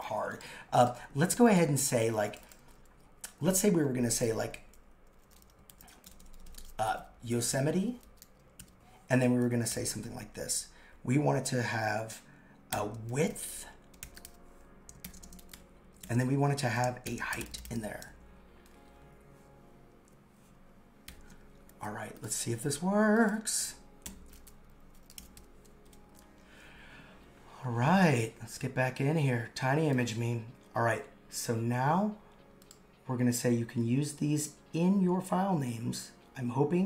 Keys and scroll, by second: 11.9 shift+3, 12.7 shift+[, 15.0 shift+], 16.6 shift+3, 17.0 shift+[, 21.1 shift+], 24.0 super+/.